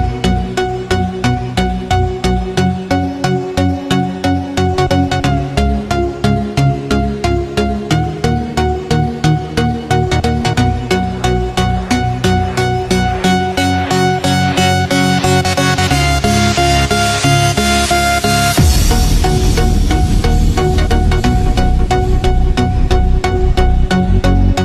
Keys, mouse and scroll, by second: 0.3-0.6 scroll down 2, 0.6 b, 1.0-1.5 drag, 2.6 b, 3.9 shift+click, 8.3 b, 8.8 shift+click, 10.1 shift+click, 11.0 ctrl+j, 11.4 click, 12.9 click, 13.4 KP_7, 15.2 s, 17.3 s, 19.1 click, 20.3-22.5 middle drag, 22.5 click.